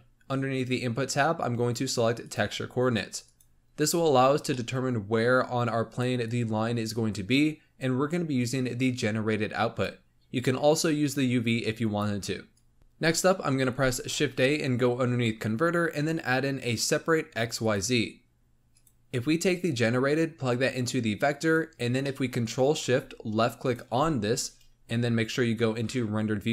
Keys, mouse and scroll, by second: 3.8-4.5 scroll up 2, 4.5-5.6 middle drag, 5.6-12.8 drag, 12.8 middle click, 13.6 shift+a, 19.6 click, 22.0 middle click, 22.2-23.5 scroll up 1, 23.5 ctrl+shift+click, 24.9 z.